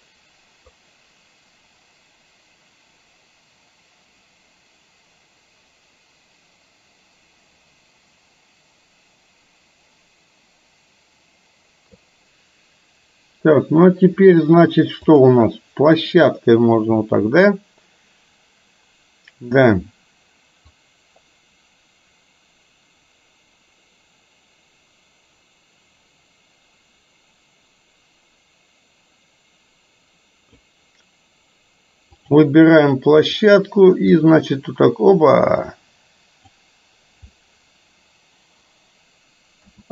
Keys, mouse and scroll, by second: 0.9-12.0 drag, 15.1 click, 20.9-30.8 drag, 32.3 click, 33.4 click, 34.4-36.6 drag, 39.6 a.